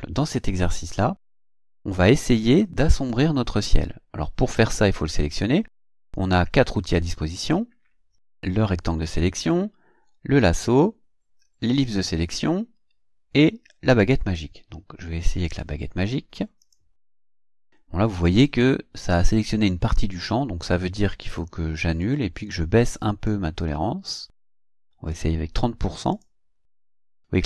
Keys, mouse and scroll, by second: 15.5 click, 16.6 click, 22.0 click, 23.3-25.3 drag, 26.1 click.